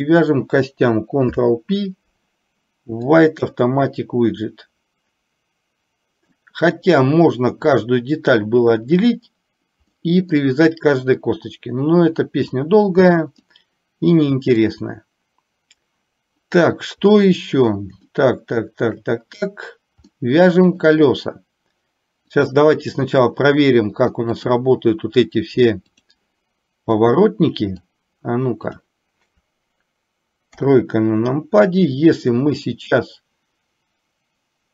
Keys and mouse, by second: 1.3 ctrl+p, 6.4-8.0 middle drag, 10.0 middle click, 13.6-14.7 middle drag, 18.3 shift+middle click, 20.3 middle click, 22.3 click, 24.4-26.2 drag, 27.1 middle click, 28.8 click, 30.6 KP_3.